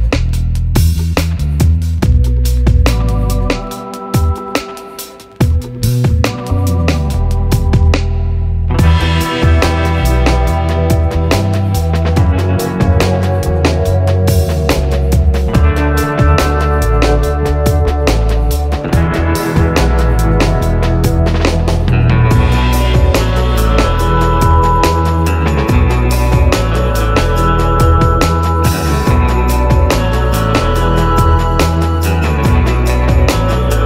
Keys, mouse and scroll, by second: 3.6 scroll up 1, 5.2-7.5 drag, 7.5 scroll down 1, 8.8 middle click, 10.7-23.0 drag, 23.0 scroll down 1, 24.2-27.8 drag, 27.8 middle click, 30.0 click, 30.9-32.2 ctrl+drag, 33.6-33.8 typing.